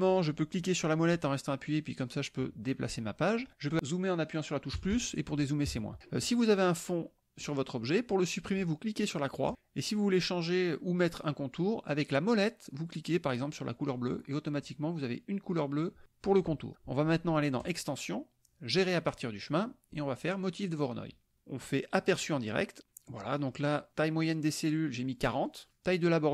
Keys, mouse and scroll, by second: 1.1-3.5 drag, 4.8 KP_Add, 5.7 KP_Subtract, 7.4 click, 9.5 click, 14.1 click, 17.6 click, 20.9 click, 22.1 click, 25.5 click.